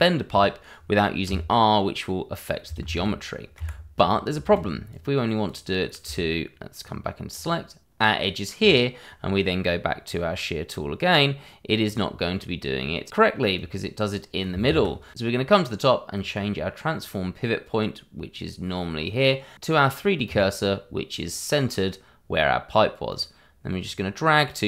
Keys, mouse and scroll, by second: 0.2 shift+middle click, 1.2 r, 2.8 ctrl+z, 3.5 Escape, 4.0 scroll up 1, 4.4 shift+z, 4.9 click, 10.1-11.8 scroll down 1, 11.8 click, 13.5 click, 14.6 ctrl+z, 16.1 click, 20.2 click, 23.1 click.